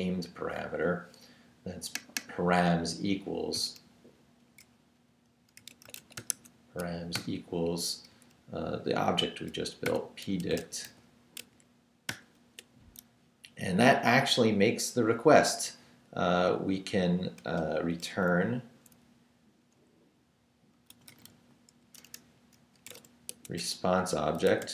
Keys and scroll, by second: 5.3-7.1 typing, 9.6-12.1 typing, 17.4 Return, 20.5-24.7 typing.